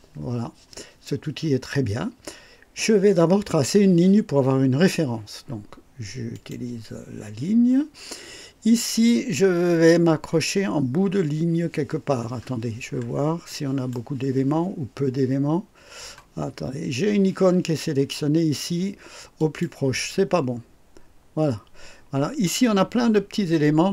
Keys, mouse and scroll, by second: 6.3 click, 12.4-13.2 scroll up 2, 13.5 right click, 19.4 click.